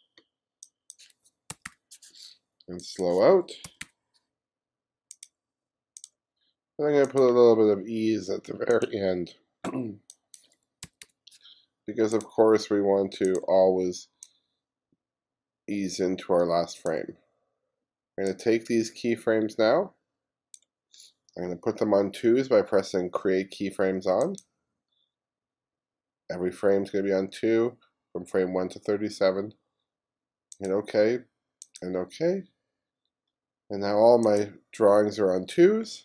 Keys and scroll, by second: 1.4-2.2 typing, 3.4-4.3 typing, 10.7-11.6 typing.